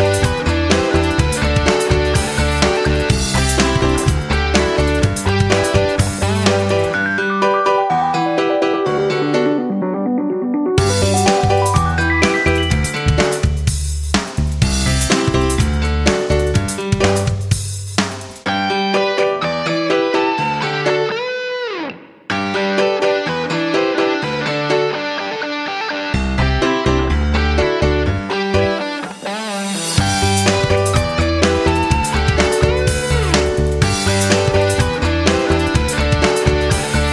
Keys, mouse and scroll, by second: 8.9 shift+Up, 10.2 click, 12.3 shift+click, 13.1 ctrl+g, 13.7-18.3 drag, 18.6 Down, 18.7 Down, 18.9 Left, 19.1 Left, 20.6-28.1 drag, 28.1 Up, 28.3 Up, 28.5 Left, 28.7 Left, 28.9 Left, 29.1 Left, 31.7-37.1 ctrl+shift+drag.